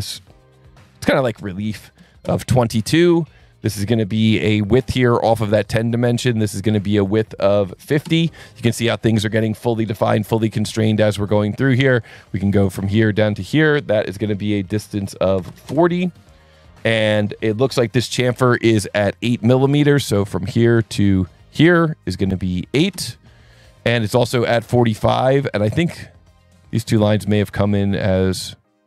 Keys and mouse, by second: 2.0 KP_2, 2.2 KP_Enter, 5.0 click, 6.5 click, 7.0 click, 7.8 KP_5, 7.9 KP_0, 8.0 KP_Enter, 11.8 click, 13.0 click, 13.5 click, 15.3 KP_4, 15.5 KP_0, 15.7 KP_Enter, 19.7 click, 21.5 click, 22.1 click, 22.7 KP_8, 22.9 KP_Enter, 24.0 Escape, 24.9 click, 27.9 click.